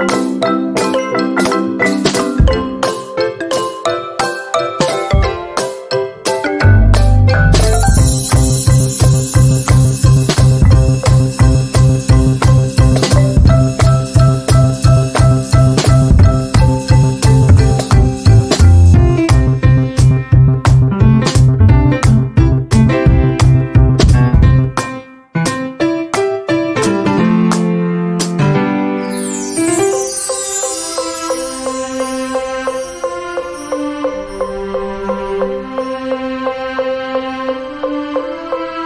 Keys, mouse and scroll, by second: 0.9 Delete, 1.3 z, 1.8-4.4 drag, 4.3 F10, 4.6 click, 5.8 Down, 9.0 F10, 10.0 click, 11.0 ctrl+z, 11.6 click, 11.9 F10, 12.8-15.4 drag, 15.4 click, 17.2 click, 17.8-18.2 shift+scroll down 1, 18.2 z, 18.6-20.9 drag, 20.9 F10, 22.4 click, 24.8 Escape, 26.0 click, 29.8-31.6 drag, 32.0 ctrl+q, 33.4-36.2 drag, 36.2 ctrl+a, 36.5 click, 38.2 F10.